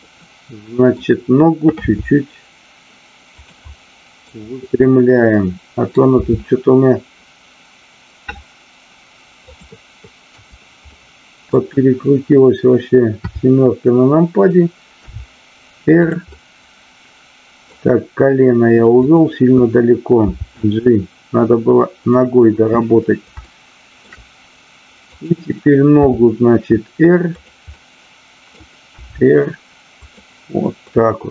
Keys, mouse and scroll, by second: 0.2-1.0 middle drag, 1.8 r, 3.6 middle click, 4.8-6.0 middle drag, 6.1 r, 9.3 click, 10.8 middle click, 13.1 KP_7, 15.1 r, 16.1 click, 16.3-17.6 middle drag, 19.0 click, 22.1 click, 23.3-24.0 shift+middle drag, 25.1 click, 27.3 click, 27.7-28.5 middle drag, 28.8 r, 29.9 click, 30.9 middle click.